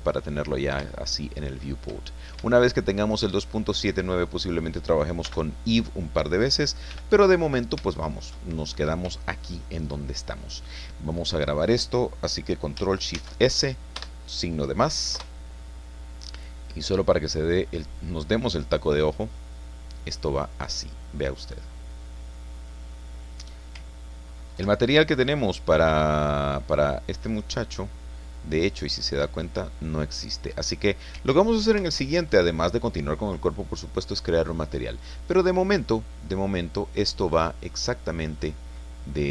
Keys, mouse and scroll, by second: 0.7 scroll up 3, 0.9 shift+middle click, 2.1 shift+scroll down 2, 2.4 shift+middle click, 3.6-5.5 drag, 5.2 n, 6.9 t, 7.4 scroll down 2, 7.9-11.0 shift+middle drag, 13.1 ctrl+shift+s, 13.9 KP_Add, 15.1 Return, 17.4 click, 18.4 click, 19.6-20.0 scroll down 2, 20.3-21.7 middle drag, 21.7 scroll up 2, 24.5 ctrl+Left, 27.3 right click, 28.5-28.9 scroll down 2, 29.1 scroll up 2, 29.5-29.9 scroll down 2, 30.2 scroll up 2, 31.7 ctrl+Right, 33.5-36.6 drag, 37.6 click, 38.8-39.3 drag.